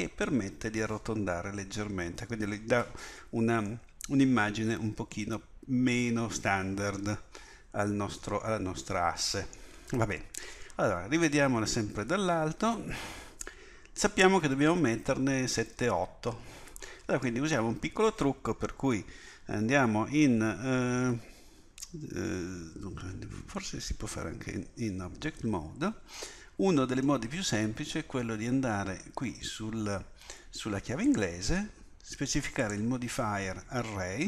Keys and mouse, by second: 1.7 click, 3.7 click, 4.1 middle click, 5.1 click, 5.5 click, 11.9 KP_1, 24.1 Tab, 27.3-34.2 drag.